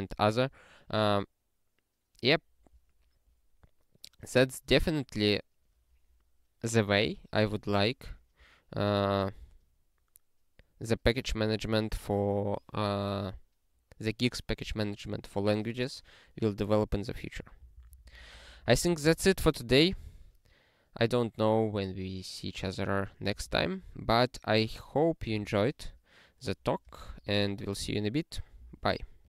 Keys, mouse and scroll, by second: 4.5 scroll down 1, 9.6 scroll down 1, 11.0 click, 17.6 ctrl+n, 17.7 ctrl+n, 17.9 ctrl+n, 18.1 ctrl+n, 18.2 ctrl+n, 18.3 ctrl+n, 18.4 ctrl+n, 18.6 ctrl+n, 18.7 ctrl+n, 18.9 ctrl+n, 19.0 ctrl+n, 19.2 ctrl+n.